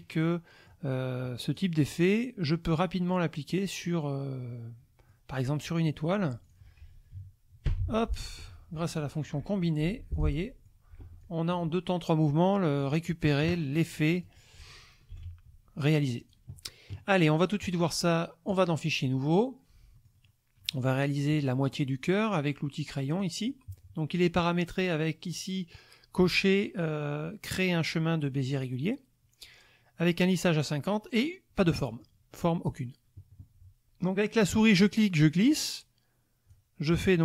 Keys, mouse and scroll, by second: 0.9-1.5 scroll up 1, 1.5 click, 3.1 click, 3.8-5.3 middle drag, 6.4 shift+click, 7.6 ctrl+k, 8.4 F2, 8.9 click, 9.8 Delete, 10.1 click, 10.5 click, 11.0 F1, 11.2 click, 12.8 click, 13.7-14.4 drag, 15.1 ctrl+g, 16.2 click, 17.6 click, 18.5 click, 19.9 middle click, 20.3 click, 20.6 click, 23.2 click, 28.5 click, 31.9 middle click, 34.8-36.7 drag.